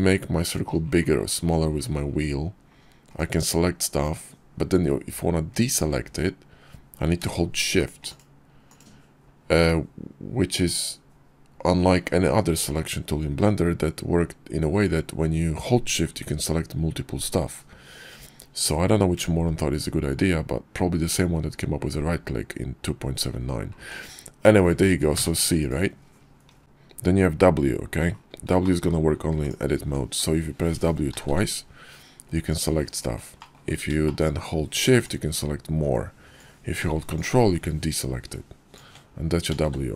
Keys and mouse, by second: 28.7 shift+middle drag, 29.5 click, 29.8 Tab, 31.1 w, 31.3 w, 32.6 click, 33.4 click, 39.5 w, 39.7 w.